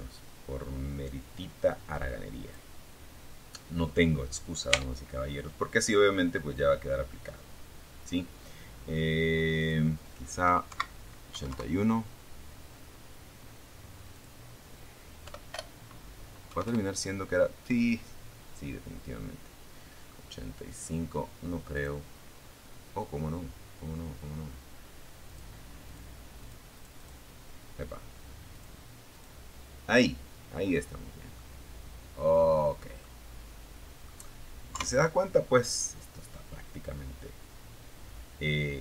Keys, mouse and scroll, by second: 2.9 Tab, 3.6 scroll down 2, 4.1-5.6 middle drag, 5.8 middle click, 7.8 click, 8.9 Right, 9.6 KP_1, 9.7 KP_Enter, 12.3 click, 13.4 End, 13.8 BackSpace, 14.7 KP_5, 14.9 KP_Enter, 19.9 click, 21.0 scroll down 1, 23.4 click, 24.0 click, 24.6 click, 25.0 click, 26.7 click, 27.3 click, 28.9-29.3 scroll down 1, 29.6-30.7 middle drag, 30.7-31.2 scroll down 1, 31.2-32.4 middle drag, 32.9 KP_3, 34.3-34.8 scroll up 2, 36.3 scroll up 1.